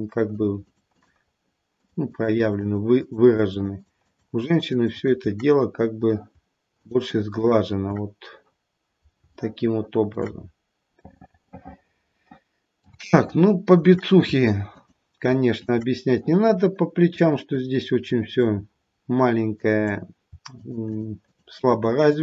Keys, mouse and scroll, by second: 0.3 shift+click, 0.6 shift+click, 0.9 shift+click, 1.7 shift+click, 2.0 shift+click, 2.3 shift+click, 2.6 shift+click, 2.9 shift+click, 3.2 shift+click, 3.5 shift+click, 3.7 shift+click, 4.0 shift+click, 4.3 shift+click, 4.7 shift+click, 4.9 shift+click, 5.5-6.3 scroll down 6, 6.8 shift+click, 7.0 shift+click, 7.3 shift+click, 8.7-9.1 scroll down 1, 9.3 shift+middle click, 10.2-11.1 scroll up 1, 11.1 middle click, 11.1-11.7 scroll up 3, 13.2 shift+middle click, 14.7 shift+click, 15.2 shift+click, 15.6 shift+click, 16.1 click, 17.0 click, 18.1 click, 19.5 click, 20.5 shift+click, 20.8 shift+click, 21.2 shift+click, 21.5 shift+click, 21.8 shift+click, 22.1 shift+click.